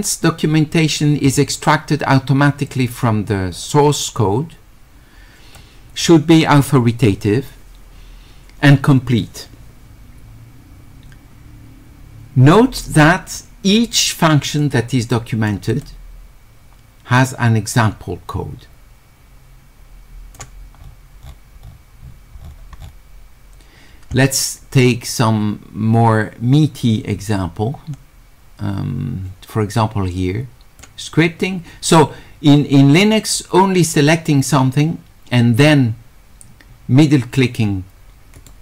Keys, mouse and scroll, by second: 2.7-5.6 drag, 14.6 click, 15.7 click, 17.8-20.4 drag, 20.8-23.8 middle drag, 25.1-30.8 drag, 33.1 click, 35.6 click, 37.3-37.7 scroll up 2, 38.4 middle click.